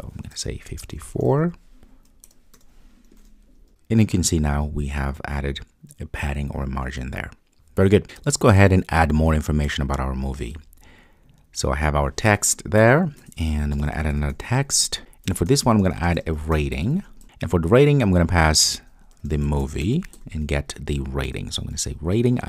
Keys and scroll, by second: 3.2 super+s.